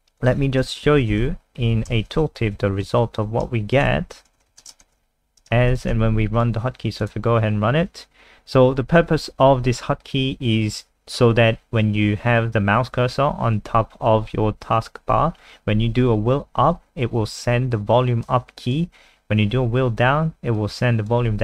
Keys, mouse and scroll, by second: 0.1 click, 0.8 Down, 1.1 Home, 1.3 ctrl+Right, 2.0 shift+End, 2.2 ctrl+c, 2.4 Up, 2.6 End, 2.8 Return, 3.5-5.3 typing, 5.7 ctrl+v, 5.9 ctrl+s, 6.3 click.